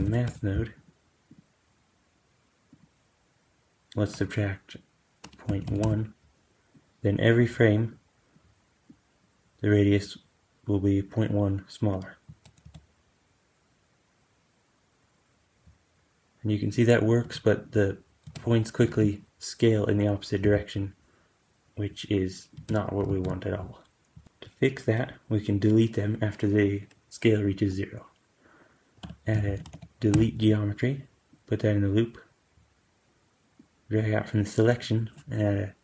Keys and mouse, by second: 1.2-17.6 drag, 12.1 space, 12.5 g, 18.2 space, 18.7 shift+Left, 20.3 g, 22.5 space, 23.0 shift+Left, 24.0 g, 28.9 q, 29.6 e, 33.5-35.8 drag.